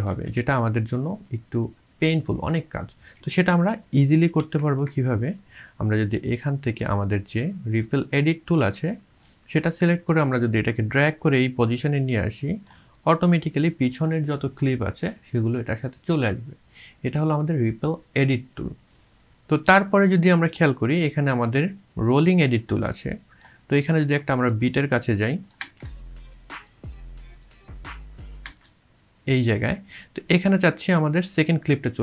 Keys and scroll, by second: 0.1 ctrl+z, 3.6 ctrl+z, 25.6 space, 28.6 space.